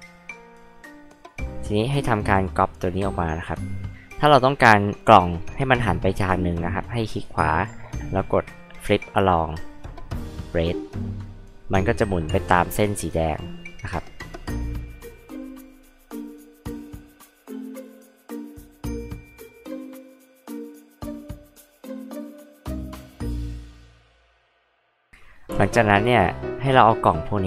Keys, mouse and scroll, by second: 1.2 click, 2.3 ctrl+click, 7.1 right click, 10.8 click, 14.4 space, 14.6 click, 15.0 space, 15.1 click, 15.8 m, 16.4 j, 16.4 click, 16.7 click, 17.7 ctrl+click, 18.5 ctrl+click, 18.8 right click, 20.5 click, 20.8 h, 20.9 drag, 21.3 space, 21.4 click, 21.7 m, 21.9 ctrl+click, 23.5 click, 23.6 right click, 24.4 click, 24.7 space, 24.7 click, 25.5 h, 25.7 click.